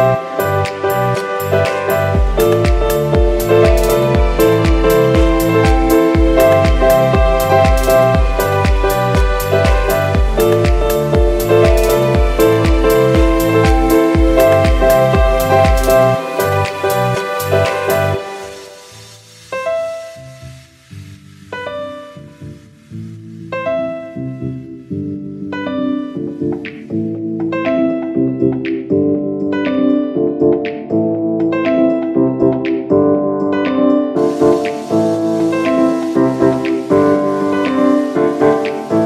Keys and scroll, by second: 4.7 space, 9.2 space, 13.6 F9, 23.5 ctrl+-, 24.7 ctrl+space, 25.1 ctrl+space, 27.0 space, 28.0 space, 28.8 space, 30.0 space, 30.4 space, 32.0 ctrl++, 32.3 space, 32.8 space, 33.6 space, 34.1 space, 35.6 space, 36.6-39.0 typing.